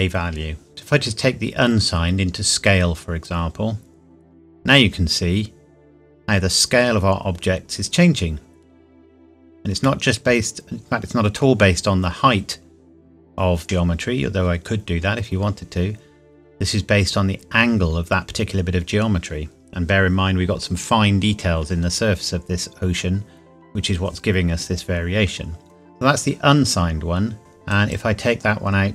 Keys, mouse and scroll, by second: 1.0 click, 5.2 scroll up 1, 7.5 scroll down 1, 10.0 middle click, 12.6 scroll down 1, 22.0 scroll up 1, 26.7-27.1 scroll up 1, 27.7 click.